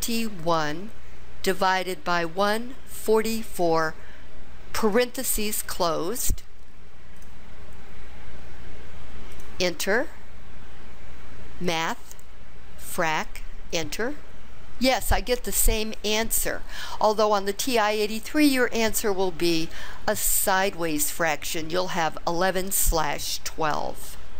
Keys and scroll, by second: 0.5 1.